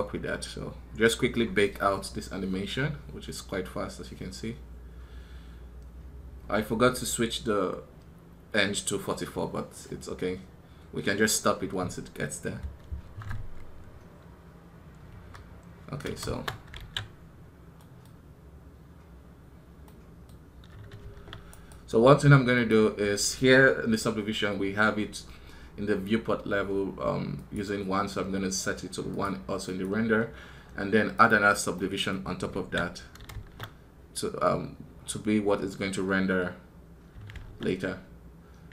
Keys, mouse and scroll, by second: 21.4 right click, 31.2-38.7 drag.